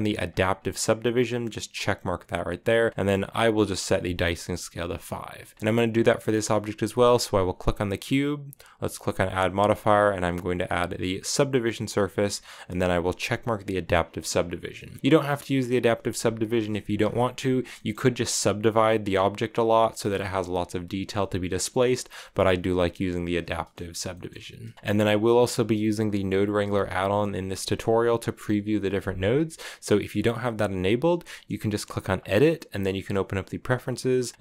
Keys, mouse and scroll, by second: 0.0-2.9 drag, 6.7 right click, 8.2-11.2 drag, 14.1 click, 14.5 shift+middle click, 14.8 z, 16.2 click, 16.6 shift+middle click, 16.7 scroll up 4, 17.5 shift+middle click, 17.7 scroll up 1, 18.6-21.3 middle drag, 18.6-19.3 scroll up 1, 19.3-20.8 scroll up 1, 20.8-21.3 scroll up 1, 21.3 scroll down 2, 21.4 Tab, 22.9 click, 23.2-24.2 shift+middle drag, 24.2-24.7 scroll down 2, 24.3 shift+middle drag, 24.7 x, 27.3-30.4 middle drag, 31.9-34.4 drag.